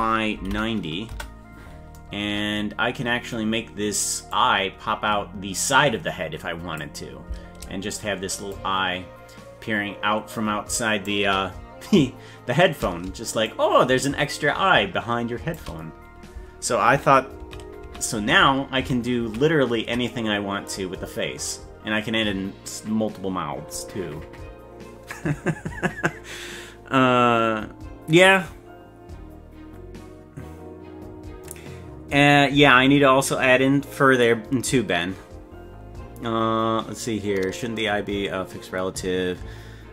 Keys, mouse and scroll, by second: 4.3-6.8 drag, 8.5-11.1 shift+drag, 13.5-15.6 shift+drag, 17.5 ctrl+z, 18.0 ctrl+z, 18.4 ctrl+z, 19.0 ctrl+z, 19.4 ctrl+z.